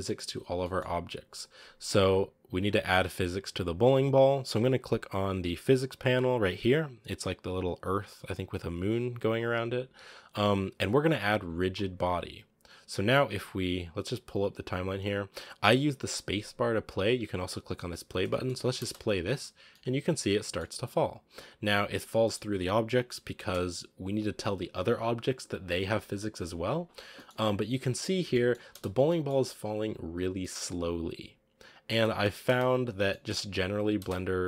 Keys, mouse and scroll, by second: 0.0-2.4 middle drag, 2.4 right click, 11.8-18.3 drag, 18.3 middle click, 18.6 space, 19.7-21.5 middle drag, 21.5-21.9 scroll down 5, 21.9-23.2 middle drag, 23.2 space, 24.4-27.0 drag, 27.0 middle click, 27.2-27.7 scroll up 4, 27.7 click, 28.2 middle click, 28.6 space, 28.9 scroll up 1, 28.9 middle click, 29.8-30.4 scroll down 1, 30.4-32.0 middle drag, 32.0 space, 32.3 space, 32.5 scroll down 3, 32.9 middle click, 33.8 space, 34.0-34.4 drag.